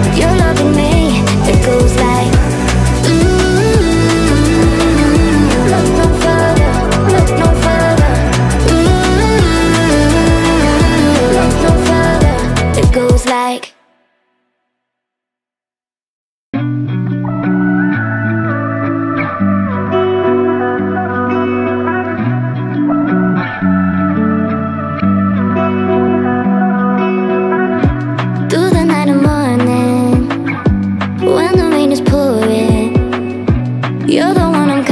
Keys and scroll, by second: 5.6-11.0 typing, 15.8-17.1 typing.